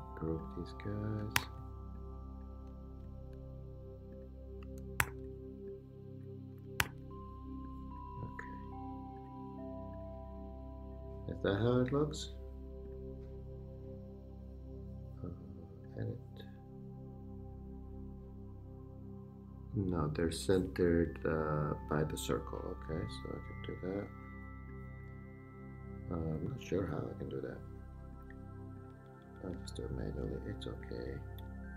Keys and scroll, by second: 1.4 super+g, 5.0 shift+super+g, 5.7 super+g, 6.9 super+g, 31.0 Down.